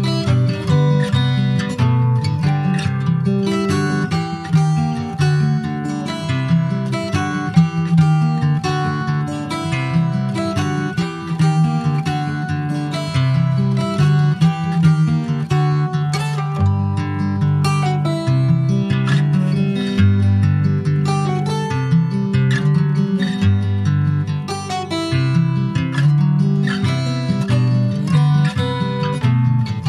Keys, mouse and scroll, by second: 0.0 shift+middle click, 0.7 ctrl+s, 0.9 click, 1.3 shift+middle click, 1.5 scroll up 1, 2.0 Tab, 2.5 Tab, 3.8 ctrl+a, 4.9 Tab, 5.2 middle click, 5.7 click, 6.7 middle click, 7.2 ctrl+b, 12.5-15.1 drag, 15.6 alt+middle click, 16.5 Tab, 16.7 click, 17.6 alt+middle click, 18.4 ctrl+s, 18.5 ctrl+click, 18.8 shift+middle click, 19.0 shift+scroll up 1, 19.3 middle click, 20.0 ctrl+s, 20.1 click, 20.3-22.0 shift+middle drag, 22.0-22.7 scroll up 3, 22.2 shift+middle click, 22.7 click, 23.0 scroll up 2, 23.3-24.6 middle drag, 24.6 click, 25.3 click, 25.6-27.3 right drag, 27.3 click, 27.7 click, 28.0 Tab, 28.4-29.8 middle drag.